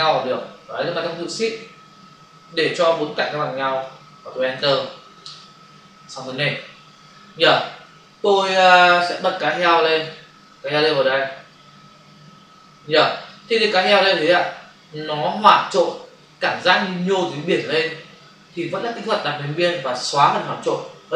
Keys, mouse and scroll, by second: 4.4 Return, 9.4 click, 9.6 click, 9.8 double click, 10.6 click.